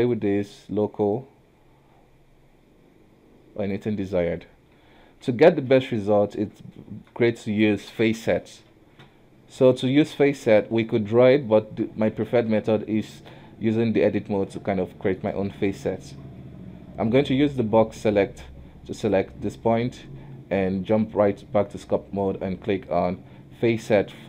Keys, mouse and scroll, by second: 4.2 ctrl+z, 4.6 scroll down 1, 4.8 KP_1, 5.3 Tab, 5.8 alt+a, 6.9 shift+middle click, 7.3 scroll up 1, 10.4 Tab, 11.7 Tab, 12.4 alt+a, 13.1 shift+middle click, 13.4-14.1 scroll up 1, 14.1 scroll down 1, 14.9-16.5 shift+middle drag, 16.5 b, 19.7 Tab, 21.8 q.